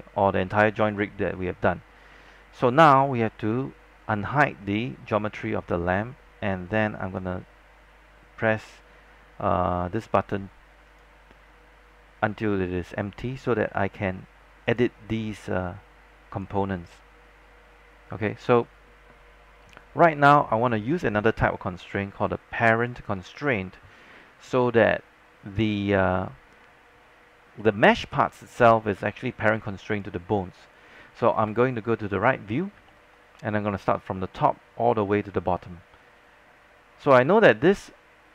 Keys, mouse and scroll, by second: 2.1 scroll down 1, 2.4 alt+middle click, 7.1-12.0 drag, 13.8 alt+middle click, 14.8 click, 15.8-16.4 scroll up 1, 16.4 click, 18.4-18.9 scroll down 1, 18.9-21.9 scroll up 1, 22.4 alt+middle click, 27.0-28.5 scroll down 1, 28.5-29.8 scroll up 1, 31.3 space, 31.4 click, 33.1 alt+middle click, 35.6 alt+middle click.